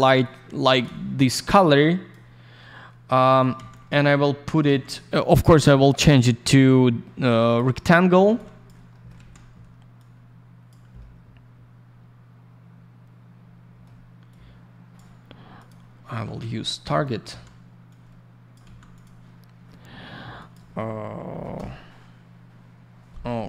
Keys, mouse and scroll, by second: 0.2 shift+click, 3.4 scroll down 1, 5.9 click, 6.0 click, 7.2 click, 8.2 alt+я, 8.9 alt+middle click, 9.0 middle click, 9.9 click, 10.9 alt+middle click, 14.3 click, 15.5 click, 15.6 click, 16.4 й, 16.9 click, 17.9 click, 18.6 ц, 18.9 click, 20.3 click, 20.5 click, 21.3 typing, 21.5 Return.